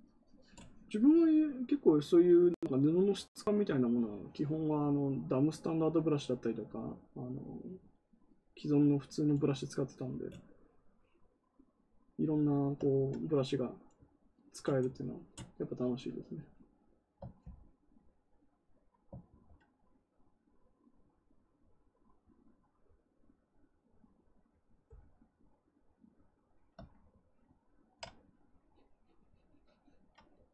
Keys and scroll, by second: 19.2 ctrl+z.